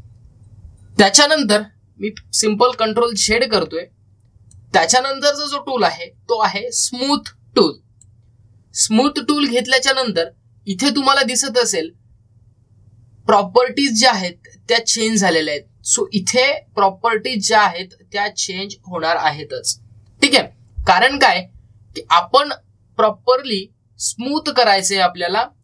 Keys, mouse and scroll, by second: 3.6 ctrl+z, 5.4-11.3 drag.